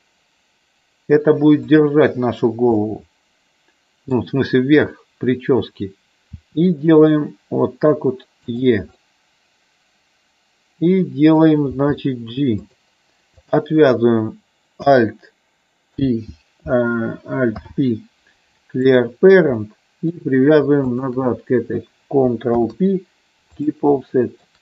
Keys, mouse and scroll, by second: 1.7 click, 2.8-4.2 middle drag, 6.3 e, 8.9-11.3 middle drag, 11.8 g, 12.5 click, 13.3 click, 15.8 alt+k, 17.6 alt+p, 19.6 middle click, 20.9 shift+click, 22.5 ctrl+p, 24.1 middle click.